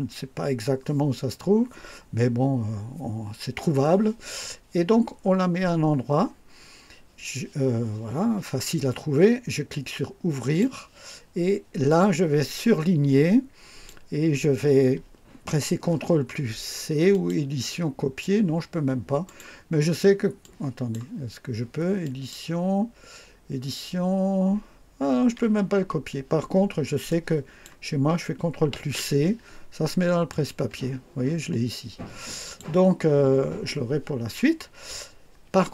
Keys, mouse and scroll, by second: 10.4 click, 11.9-14.0 drag, 17.1 click, 19.2 click, 20.4 click, 22.0 click, 25.8 Escape, 27.1 click, 28.7 ctrl+c, 30.3 click, 32.4 click.